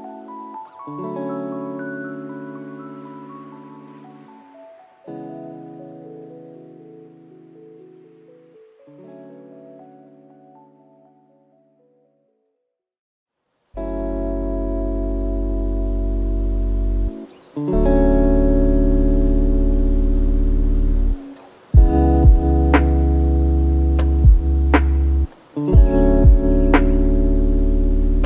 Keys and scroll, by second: 0.1 KP_1, 0.3 KP_0, 1.5 Return, 22.0 ctrl+KP_0, 24.1 ctrl+KP_0.